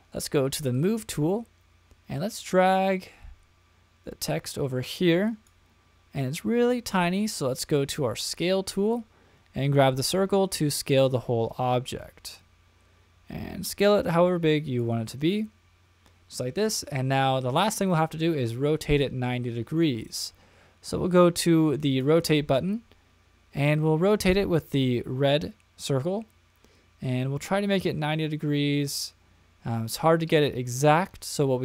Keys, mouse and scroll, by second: 0.7 click, 2.5-5.5 drag, 8.2 click, 9.7-14.8 drag, 21.9 click, 23.7-30.8 drag.